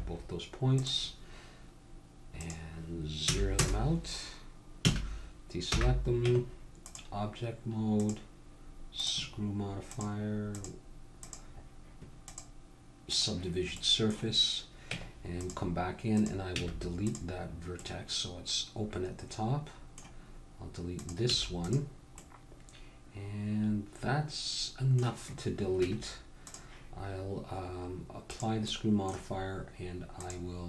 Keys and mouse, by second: 0.8-4.3 drag, 4.8 a, 5.7 n, 6.2 Tab, 7.9-9.8 drag, 9.9-15.0 drag, 15.0 Tab, 16.1-18.0 drag, 16.6 x, 18.0-19.7 middle drag, 21.0-22.2 drag, 21.3 x, 22.2 middle click, 22.5-24.1 drag, 25.8 Tab, 28.3 click, 28.7 click, 30.1 middle click.